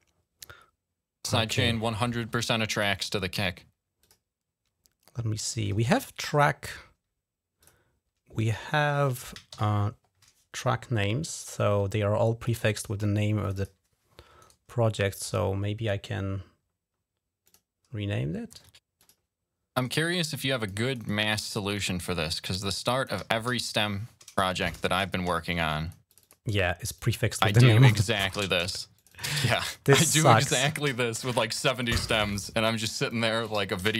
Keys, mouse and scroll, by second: 2.6 click, 3.9 click, 7.5 click, 9.4 shift+l, 11.4 click, 13.3 click, 13.4 click, 14.3 right click, 15.0 click, 17.3 click, 18.9 click, 19.6 right click, 20.4 click, 20.7 click, 20.9 click, 22.1 click, 23.0 Delete, 23.4 Delete, 24.4 shift+a, 25.1 Return, 25.6 click, 26.0 click, 26.8 click, 27.5 click, 28.2 Delete, 28.6 Return, 28.8 click, 29.0 click, 29.3 click, 29.5 click, 30.2 click, 30.7 Delete, 30.7 i, 31.0 Return, 31.7 click, 31.9 click, 32.5 click, 32.9 click, 33.4 Delete, 33.4 l, 33.6 Return.